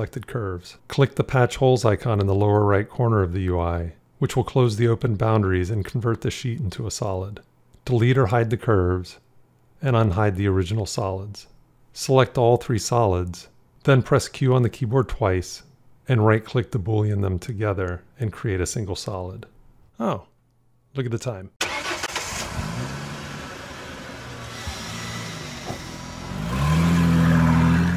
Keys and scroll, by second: 15.2 q.